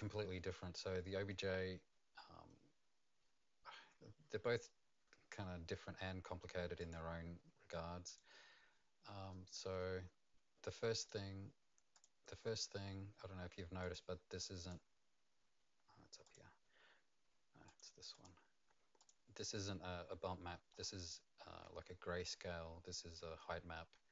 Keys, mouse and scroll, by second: 6.8 click, 8.0 click, 12.0 click, 13.8 click, 16.2 click, 17.6 click, 18.1 click, 19.0 click, 20.6-21.8 scroll up 6, 21.8-24.1 scroll down 1.